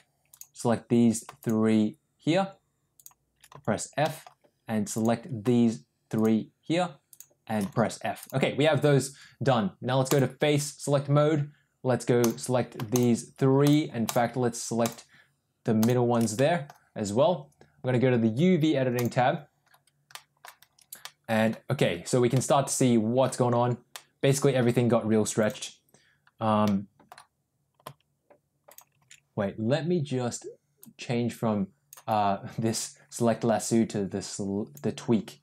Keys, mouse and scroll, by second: 4.0 middle click, 4.8 click, 6.1 click, 7.0 click, 7.6 f, 8.2 click, 10.0 click, 12.1 click, 14.1 shift+click, 14.8 shift+click, 16.4 middle click.